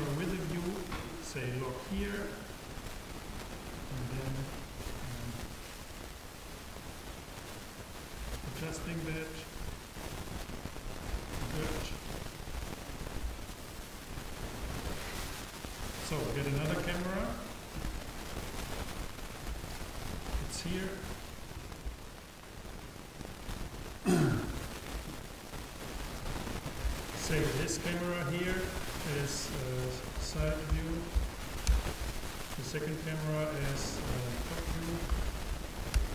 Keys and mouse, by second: 1.1-3.0 drag, 12.4-13.6 drag, 17.2 shift+a, 28.3-31.0 drag, 32.6-35.4 drag.